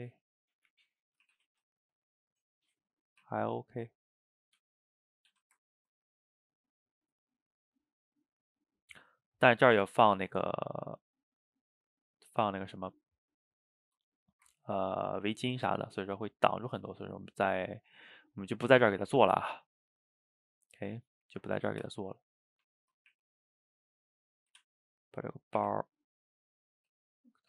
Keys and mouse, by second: 0.3 middle click, 1.3 r, 2.6-3.3 middle drag, 3.3 r, 4.0-4.6 middle drag, 4.6 g, 5.2 a, 5.3 a, 5.7-10.4 ctrl+middle drag, 10.8-13.7 middle drag, 14.3 shift+right click, 14.6-15.1 ctrl+middle drag, 15.1 click, 15.3 x, 15.9-19.9 middle drag, 20.2 click, 20.5-21.9 middle drag, 21.9 Tab, 22.7 Tab, 23.2 r, 24.8-25.6 middle drag, 25.6 r, 26.7 g.